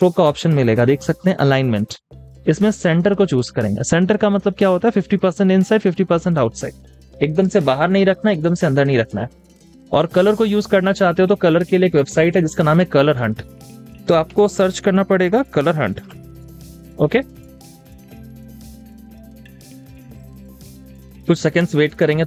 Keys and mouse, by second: 7.7 double click, 7.9 space, 8.1 double click, 8.4 space, 14.1-17.2 typing, 17.4 Return.